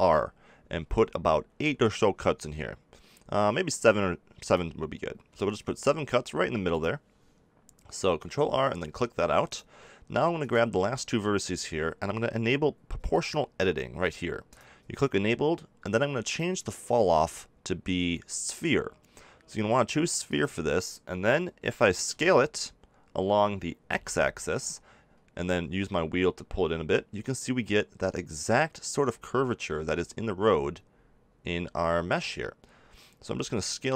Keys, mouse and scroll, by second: 9.4-11.9 drag, 12.1 click, 22.0 s.